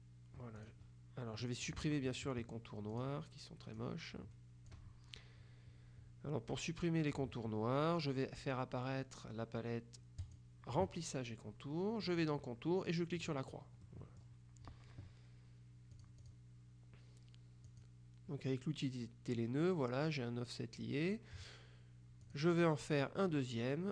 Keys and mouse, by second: 0.7 click, 1.5 click, 3.1 click, 3.9 click, 10.3 click, 12.1 click, 13.3 click, 13.9 click, 16.1 click, 17.7 click, 22.3 click.